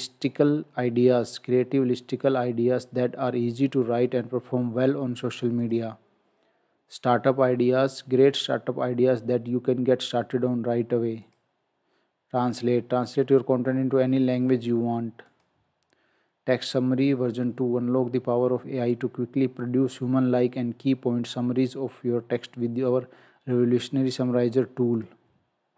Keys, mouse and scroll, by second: 5.6 click, 11.2 click, 25.0 click.